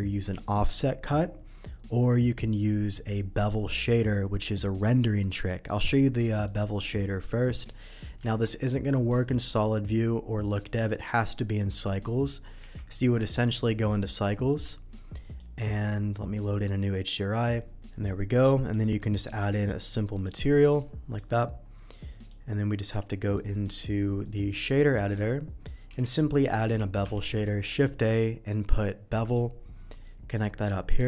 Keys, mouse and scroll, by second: 6.1 middle drag, 6.8 z, 7.2 middle drag, 8.3 alt+v, 8.6 click, 12.7 z, 14.3 shift+click, 14.3 shift+middle click, 15.2 shift+click, 17.9 middle click, 18.6 click, 19.3 click, 20.1 click, 20.7 click, 21.9 click, 23.3 click, 24.2 click, 25.0 click, 26.0 middle click, 26.0 n, 26.4 middle click, 27.1 shift+a, 28.6 click, 29.2 click, 30.0 click.